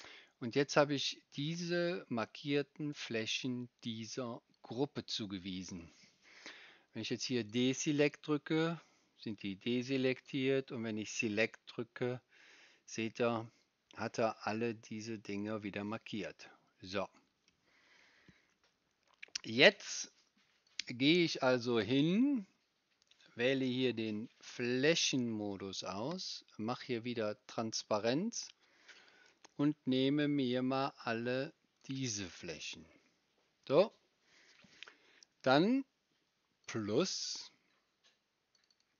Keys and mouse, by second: 16.0 click, 16.0 right click, 16.8-21.5 middle drag, 27.3-29.0 right drag, 38.6 right click.